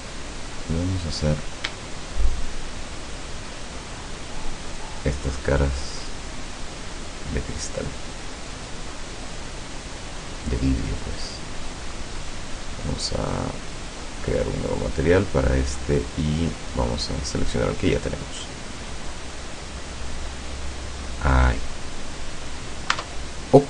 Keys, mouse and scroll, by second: 0.9 right click, 2.4 shift+right click, 3.2 shift+right click, 3.9 shift+right click, 4.7 shift+right click, 5.7-6.7 shift+middle drag, 7.0 shift+right click, 7.5 shift+right click, 8.5 shift+right click, 9.0 shift+right click, 9.3 shift+middle click, 10.5 shift+right click, 11.2 shift+middle click, 14.5 click, 16.6 click, 17.6 click, 19.3 click, 23.0 Tab.